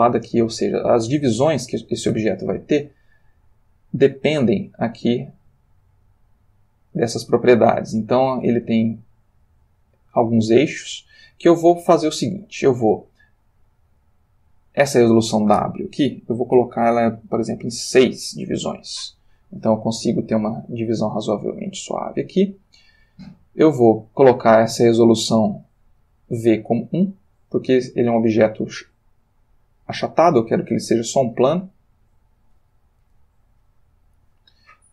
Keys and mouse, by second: 1.3-2.8 drag, 2.4 Escape, 3.5 click, 4.3-7.0 drag, 9.1-11.6 drag, 14.7 click, 17.6 6, 18.2 Return, 26.5 click, 27.9-30.8 middle drag, 31.6-32.8 drag.